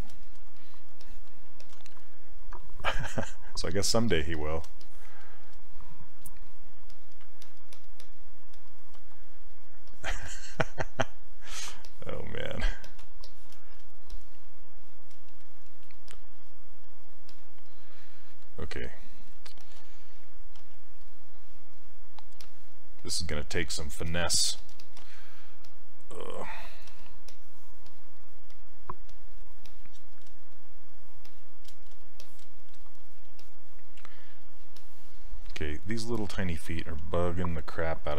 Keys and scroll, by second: 20.6 s.